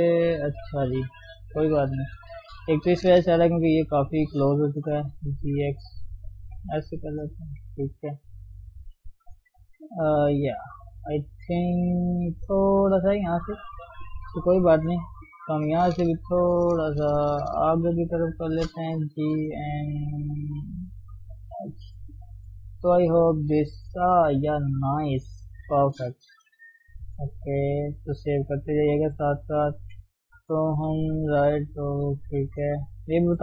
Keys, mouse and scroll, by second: 0.6 ctrl+0, 0.9 middle click, 1.2 Tab, 1.5-3.0 middle drag, 3.0-3.7 scroll up 1, 3.7 click, 4.7 g, 6.9 middle click, 7.4 Tab, 7.9-8.4 scroll down 3, 8.4 KP_3, 9.4 ctrl+1, 9.7 ctrl+2, 10.3-10.7 scroll down 1, 10.7-11.1 scroll up 1, 11.1 shift+middle click, 11.4-12.1 scroll up 1, 12.1 Tab, 12.4-13.4 scroll down 3, 13.4 Tab, 14.7 ctrl+0, 15.0 middle click, 15.5 Tab, 15.8-17.7 middle drag, 17.7 click, 17.9-19.2 middle drag, 19.2 g, 21.6 scroll down 1, 21.9 middle click, 22.6 Tab, 23.0 ctrl+1, 23.4 ctrl+2, 23.6-24.9 middle drag, 24.9-25.2 scroll down 2, 25.2 KP_3, 25.4-26.0 scroll up 2, 26.0-26.7 scroll down 1, 26.7 ctrl+shift+s, 28.2 ctrl+shift+s, 28.5-29.0 scroll down 2, 29.0-29.5 scroll up 1, 29.5 Tab, 29.9 Tab, 30.7 ctrl+0, 31.7 right click, 32.1 shift+middle click, 32.4 Tab, 32.6 scroll up 1, 32.9 shift+middle click, 33.2 scroll up 1.